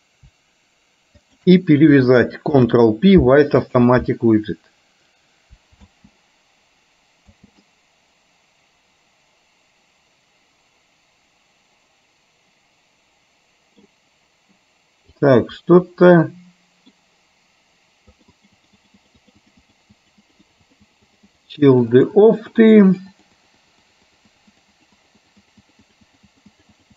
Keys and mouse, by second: 1.2 shift+click, 2.6 ctrl+p, 6.1 space, 7.6 space, 7.7-14.0 middle drag, 15.2 click, 16.2 middle click, 18.2-20.0 drag, 20.1-22.8 drag, 23.0 click, 23.2 click, 24.0-25.6 drag, 25.8-26.9 drag.